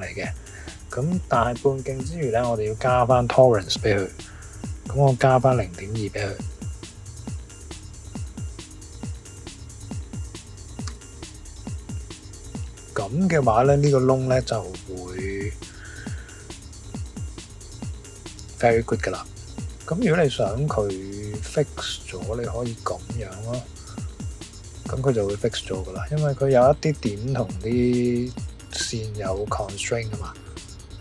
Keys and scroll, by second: 2.1 shift+=, 6.5-7.9 typing, 10.8 Return, 13.4 typing.